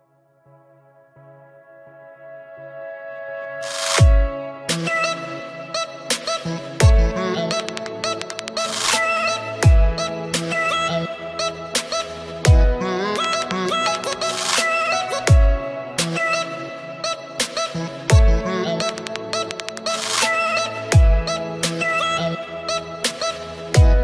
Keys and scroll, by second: 4.8 ctrl+t.